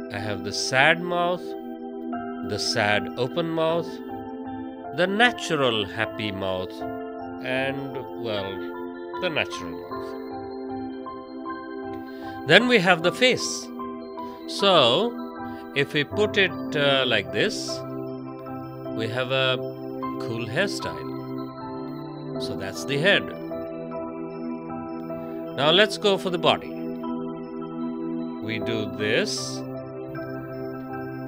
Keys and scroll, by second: 3.2 space, 21.8 ctrl+z, 22.9 space.